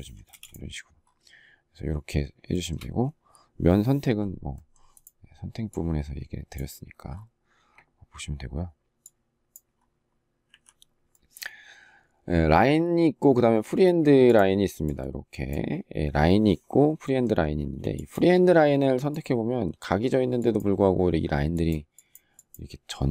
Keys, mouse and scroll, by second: 0.0 space, 2.3 shift+middle click, 10.2 Delete, 17.4 space.